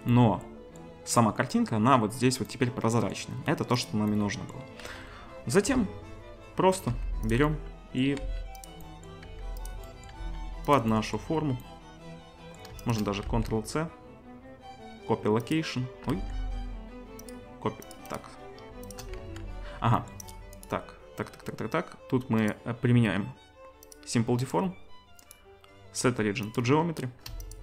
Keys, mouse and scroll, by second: 4.8-12.8 right drag, 4.8 z, 5.7 KP_7, 6.9 g, 8.2 s, 9.2 g, 10.2 s, 12.8-17.8 drag, 13.3 ctrl+c, 16.1 ctrl+c, 18.2-20.3 drag, 19.2 ctrl+c, 20.4-22.4 drag, 22.5-23.9 drag, 27.5 ctrl+shift+click.